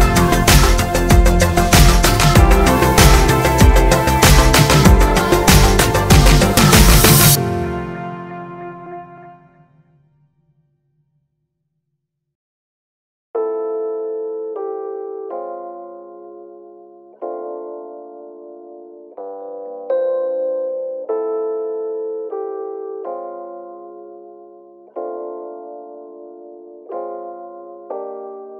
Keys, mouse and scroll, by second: 0.3 click, 1.3 click, 1.6-12.7 shift+middle drag, 8.9 Tab, 12.7 click, 12.8-14.7 middle drag, 13.8 g, 14.7 click, 14.9-18.3 middle drag, 18.3 click, 18.9 click, 19.3 click, 20.6 click, 20.9 click, 21.2-24.1 shift+middle drag, 21.6 KP_3, 22.3 scroll up 1, 22.8 Tab, 24.1 click, 24.6 g, 26.8 click, 27.8 Tab.